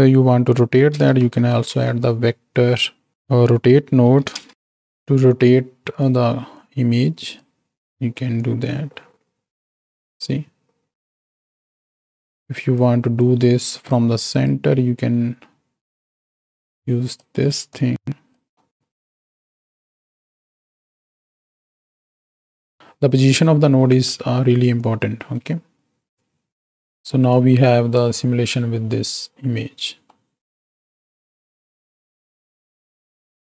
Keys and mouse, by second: 3.5 Down, 6.4 click, 8.3-11.1 drag, 11.9-12.8 drag, 13.3 click, 14.5 ctrl+drag, 16.1-17.2 drag, 17.8-18.6 drag, 18.7 click, 18.7 right click, 19.9-22.8 drag, 24.8-26.6 drag, 26.6 ctrl+x, 27.3 click, 28.6 space, 30.4-31.0 middle drag.